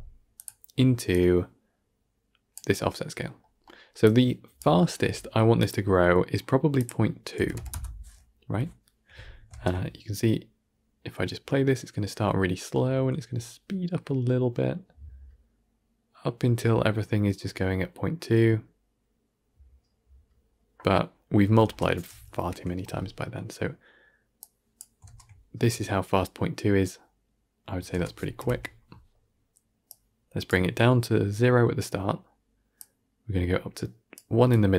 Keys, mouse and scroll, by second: 2.4 click, 3.9-4.5 drag, 7.6 click, 8.4 shift+Left, 9.4 shift+space, 21.8 shift+space, 22.3 shift+Left, 24.7 drag, 24.9 shift+space, 27.8 shift+space, 28.3 shift+Left, 30.4-34.7 drag.